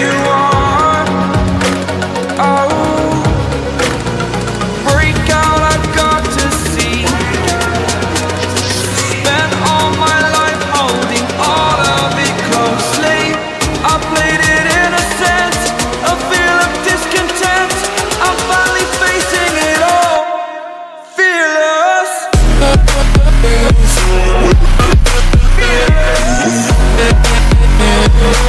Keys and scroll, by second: 1.3 ctrl+u, 9.6 ctrl+z, 16.5 ctrl+t.